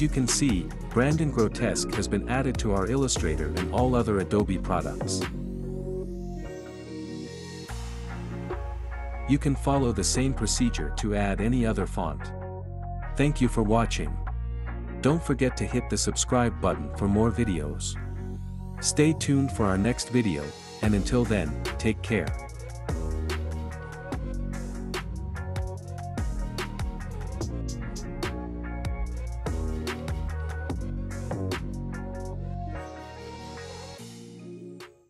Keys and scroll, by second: 0.0-0.1 typing.